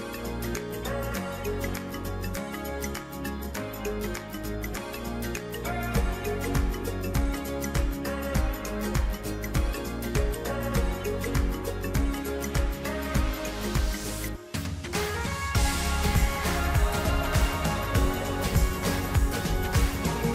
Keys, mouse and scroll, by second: 1.3 click, 1.3 click, 5.7 click, 6.9-10.4 drag, 12.2-17.4 drag, 17.4-20.3 drag.